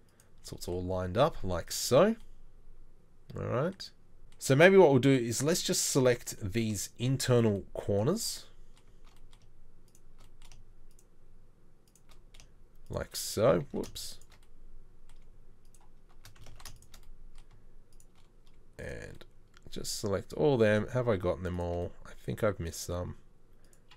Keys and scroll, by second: 1.3 z, 4.2 ctrl+z, 13.7 ctrl+z, 16.5 ctrl+z.